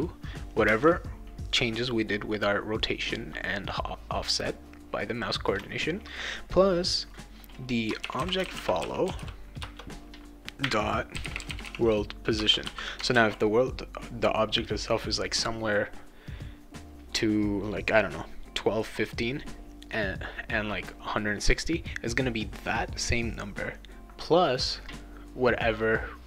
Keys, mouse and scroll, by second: 0.0-0.6 typing, 7.7-12.1 typing, 12.4 Return, 13.1 ctrl+s.